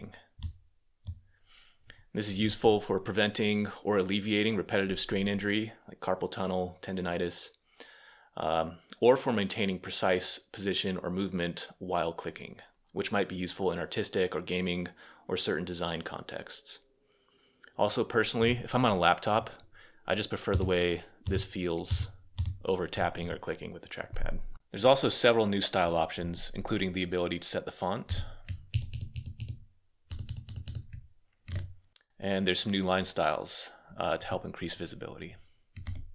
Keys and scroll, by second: 20.3-21.6 Return, 27.6-30.4 typing, 31.2 Escape, 35.3-36.1 typing.